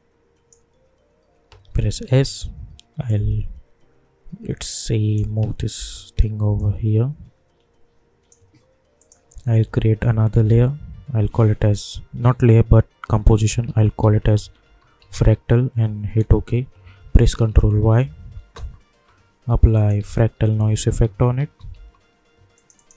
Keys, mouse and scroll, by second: 2.1 s, 3.0-5.7 drag, 5.7 v, 6.5-8.9 drag, 10.3 ctrl+n, 11.2 a, 13.1-15.6 typing, 16.2 Return, 17.4 ctrl+y, 18.3 Return, 19.7 click, 19.9 ctrl+a, 20.3-22.2 typing, 22.5-22.9 drag.